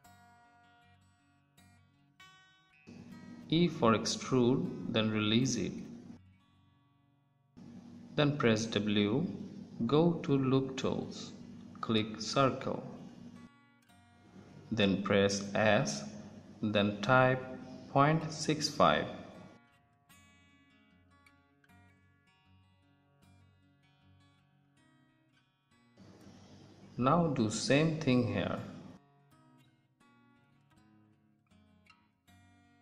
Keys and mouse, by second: 4.1 e, 8.6 w, 13.8 ctrl+z, 13.9 s, 18.4 KP_3, 28.9 e, 32.2 w.